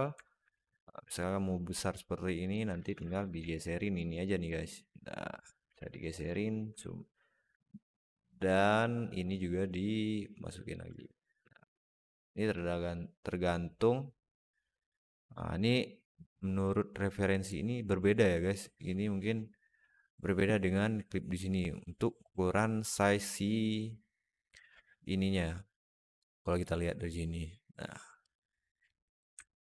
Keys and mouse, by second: 0.1 alt+middle click, 0.4 s, 2.6 alt+middle click, 2.8 Tab, 3.2 alt+z, 3.5 click, 4.3-5.5 drag, 5.6 alt+z, 6.6 alt+middle click, 7.0 middle click, 7.6 click, 7.7 click, 9.5-10.6 drag, 10.7 Tab, 11.0 alt+middle drag, 11.6-12.4 alt+middle drag, 29.2-29.6 alt+middle drag.